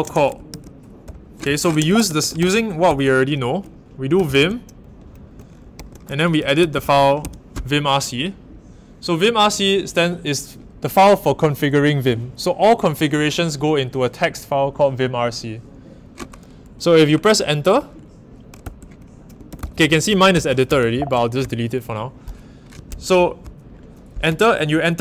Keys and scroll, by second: 0.0-2.8 typing, 3.9-7.7 typing, 18.6 Return, 19.2-21.4 typing.